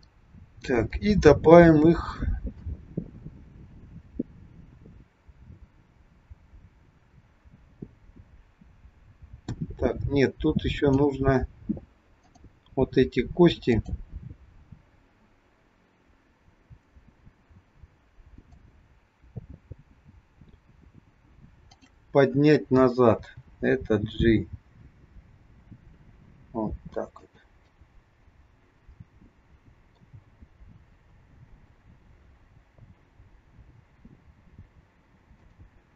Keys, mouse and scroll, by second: 0.0-0.6 scroll down 2, 0.9 shift+middle click, 2.7 click, 12.1 click, 13.6 click, 18.4 click, 21.7 shift+click, 23.1 g, 27.8 middle click, 30.9-31.7 scroll down 1, 31.7 g.